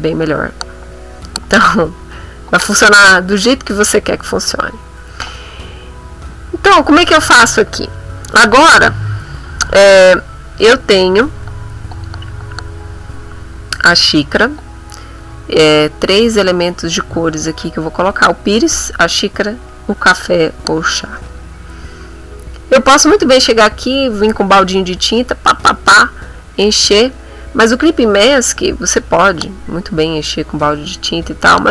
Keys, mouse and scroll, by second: 1.5 middle click, 2.1 b, 3.5 click, 5.1-6.3 ctrl+middle drag, 6.4 ctrl+middle click.